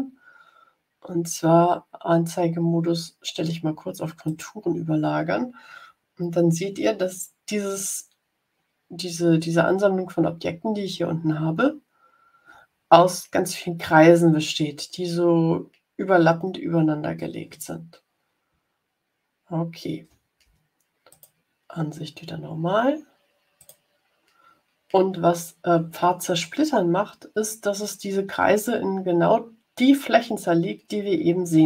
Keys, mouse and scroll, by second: 4.2 click, 10.6-11.2 ctrl+scroll up 3, 19.0-19.6 ctrl+scroll down 4, 21.0 click, 23.5 click.